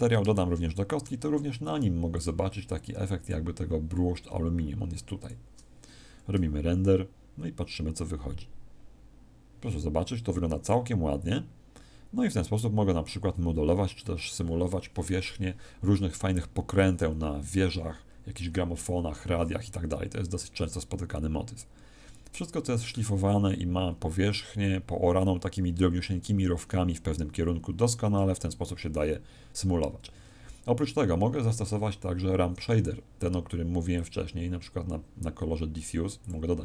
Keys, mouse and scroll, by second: 0.3 shift+middle click, 2.1 click, 3.1 click, 29.9 Escape, 33.9 click, 35.4-35.9 scroll down 2, 36.1 click.